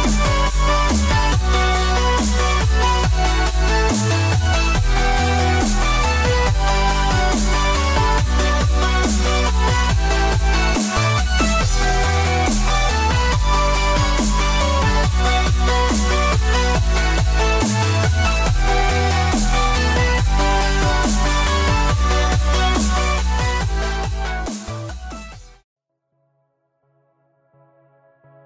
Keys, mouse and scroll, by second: 3.2 click, 4.6 l, 5.1 click, 6.1 middle click, 8.2 e, 14.1 ctrl+r, 17.4 ctrl+r, 22.7 click, 24.3 click, 25.4 click, 25.6 scroll down 3, 25.7 middle click, 27.0 right click, 28.2 click.